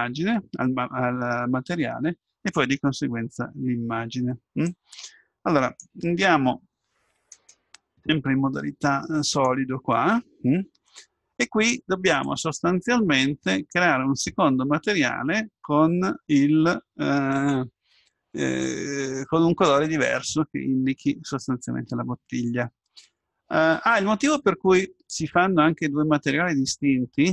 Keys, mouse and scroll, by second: 7.4-9.3 drag.